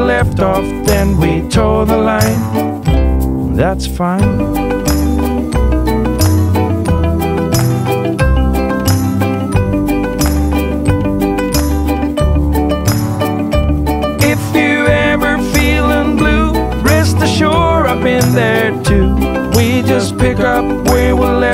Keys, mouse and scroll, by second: 3.7 click, 10.2 click, 14.2 click, 19.4 click.